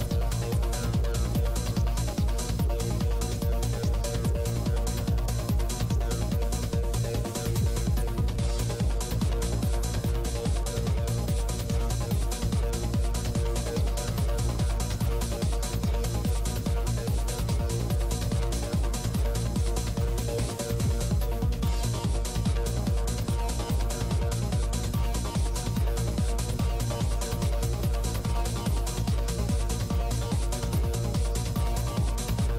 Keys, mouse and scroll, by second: 0.9-3.9 drag, 0.9 right click, 4.1 click, 5.1 click, 5.9 click, 7.0-8.6 middle drag, 7.5-9.1 drag, 9.3-10.6 drag, 10.7-12.7 drag, 11.9 middle click, 12.8 click, 13.9 f, 14.4-17.0 drag, 17.0-18.3 middle drag, 18.4 middle click, 19.2-20.5 drag, 20.7-21.7 middle drag, 21.4-23.3 drag, 23.0-24.0 middle drag, 23.8 click, 24.6 middle click, 25.3-27.1 drag, 26.4 middle click, 27.9-30.8 drag, 30.8 ctrl+z, 31.2 click.